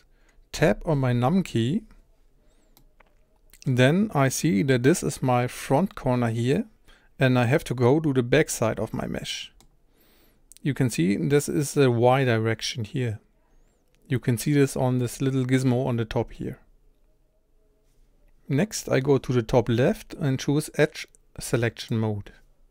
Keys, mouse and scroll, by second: 0.6 KP_1, 2.8-14.8 middle drag, 21.8-22.7 drag.